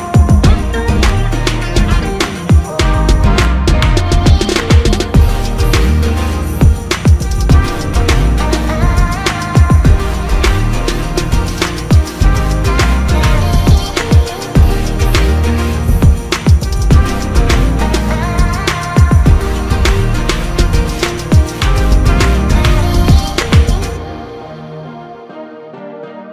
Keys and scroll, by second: 7.9 ctrl+z, 8.4 typing, 14.5 alt+space, 23.0 ctrl+KP_Subtract, 23.5 space.